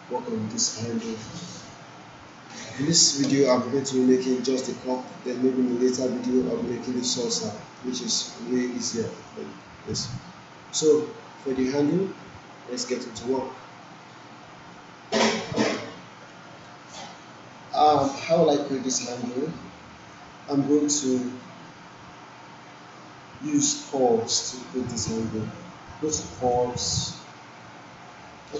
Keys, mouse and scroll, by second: 3.7 alt+middle click, 4.0-4.6 alt+right click, 5.2-5.8 alt+right click, 6.2-6.9 alt+middle click, 8.1-9.0 alt+right drag, 9.5 alt+middle click, 20.6-21.2 alt+middle drag, 26.4 click.